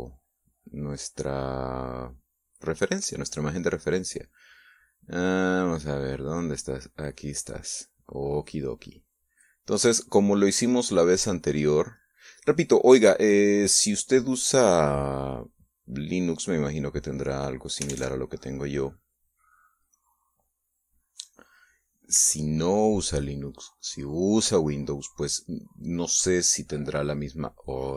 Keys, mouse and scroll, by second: 0.5-6.8 drag, 7.6 click, 9.4 click, 12.0-13.0 drag, 13.8 click, 18.0 click, 18.7 alt+Tab, 21.4-25.2 drag, 27.0 click.